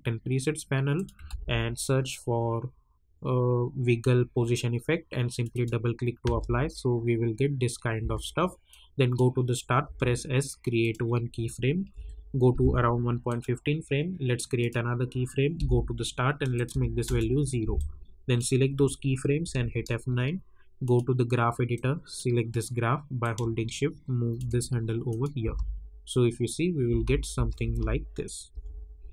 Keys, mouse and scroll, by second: 1.2 ctrl+a, 5.3 click, 6.2 space, 8.7 click, 9.8 s, 10.8 click, 11.9 =, 13.2 click, 15.5 j, 16.5 click, 17.0 Return, 17.7-19.4 drag, 19.4 F9, 20.8-25.1 drag, 25.4 space, 28.5 j.